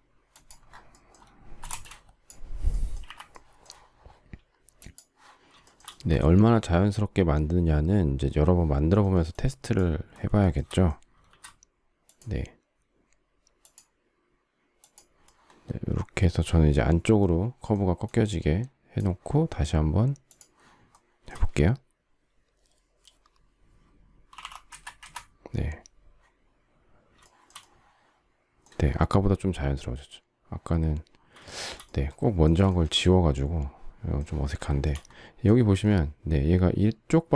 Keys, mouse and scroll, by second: 1.6 space, 4.3 Delete, 10.4 shift+middle click, 11.2 shift+x, 20.9 shift+middle click, 24.0-24.8 typing, 31.4 shift+middle click, 32.6 shift+middle click, 32.8 shift+middle click, 34.5 shift+middle click.